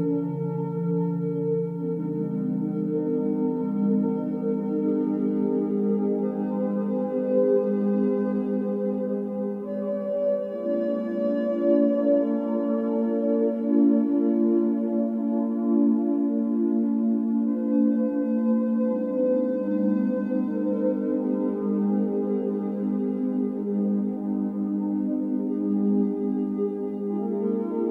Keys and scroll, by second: 0.3 Return, 1.6 typing, 2.4 Return, 5.1-7.6 typing, 6.6 Escape, 10.1 Escape, 10.6-11.4 typing, 12.4-14.7 typing, 14.9 Return, 18.2-20.5 typing, 26.4 Escape.